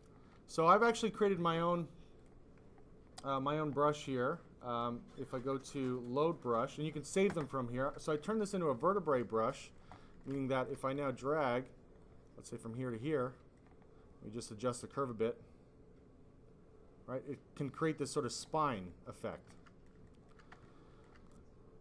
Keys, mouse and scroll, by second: 1.3 ctrl+z, 2.1 click, 2.6 click, 3.2 click, 3.3 click, 3.9 click, 5.1 click, 5.2 click, 6.1 click, 7.8 click, 7.9 click, 9.0 alt+click, 9.5 click, 9.9 alt+click, 10.3 click, 10.9 click, 11.9 click, 13.0 click, 14.5 click, 18.8 click, 19.6 alt+click, 20.0 alt+click, 20.7 alt+click.